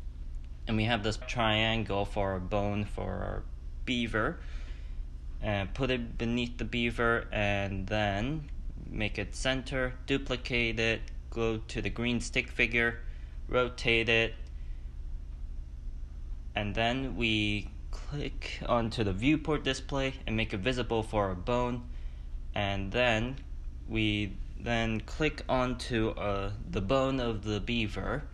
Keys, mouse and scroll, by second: 0.9-1.4 middle drag, 1.4-1.8 scroll down 4, 1.8-2.1 middle drag, 2.1-3.1 drag, 3.3 scroll up 5, 3.5-4.0 middle drag, 4.0 click, 5.2 click, 6.2-6.7 middle drag, 6.7 click, 7.1-7.9 middle drag, 7.9-8.4 drag, 9.0 click, 9.4 ctrl+d, 10.9 drag, 11.5-11.9 drag, 12.7 s, 13.7 click, 14.1 ctrl+z, 14.8 r, 16.0 click, 16.5 r, 17.1 click, 18.3 click, 19.4 click, 28.2-28.3 drag.